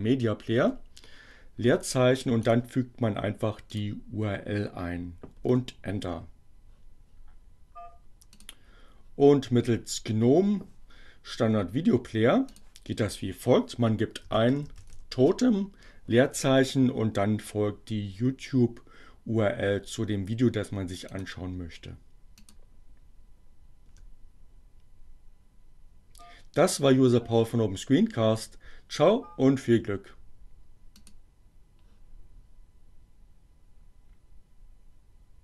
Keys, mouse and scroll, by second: 0.2 space, 2.2 right click, 3.7 click, 5.4 KP_Enter, 8.3 click, 10.7-12.7 drag, 12.9-15.5 typing, 20.7 right click, 22.4 click, 23.6 KP_Enter, 30.9 click.